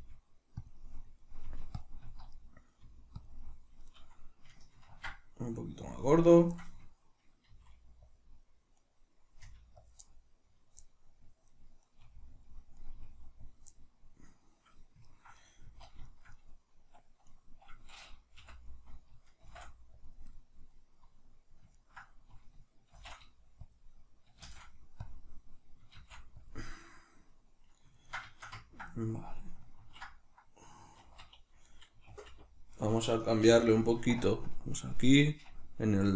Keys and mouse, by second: 0.6 click, 0.8-1.8 middle drag, 1.4 g, 1.8 click, 2.0 z, 2.3 middle click, 2.8 g, 3.2 click, 3.6 middle click, 3.8 right click, 4.8 ctrl+alt+s, 5.9 click, 6.2 right click, 7.5 middle click, 7.5 g, 8.2 click, 8.8 right click, 9.5 g, 9.9 click, 10.1-11.9 middle drag, 11.9 right click, 12.1 g, 12.5 click, 12.8 right click, 12.9 g, 13.6 click, 13.7-17.3 middle drag, 15.6 z, 17.3 right click, 18.4 l, 19.5 shift+n, 20.3-22.9 middle drag, 22.9 shift+n, 26.7 middle click, 28.9-31.7 middle drag, 29.8 ctrl+t, 31.7 right click, 32.1 alt+t, 34.4-36.1 drag.